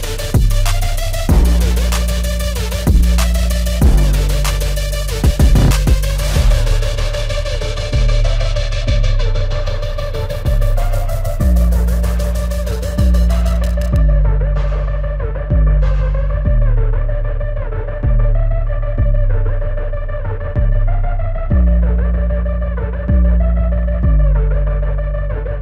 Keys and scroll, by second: 19.2 ctrl+t.